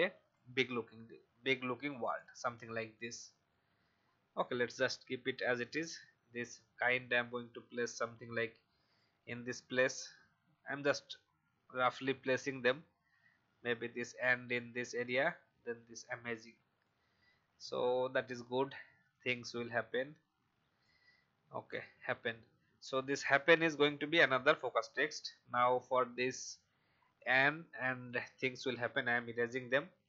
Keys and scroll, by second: 28.9 shift+Delete.